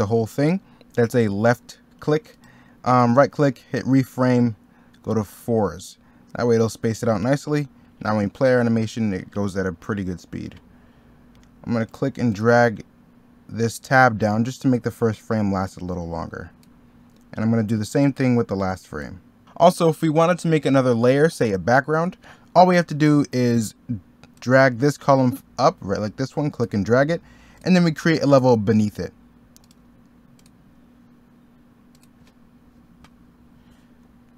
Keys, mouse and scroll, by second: 34.1 middle click.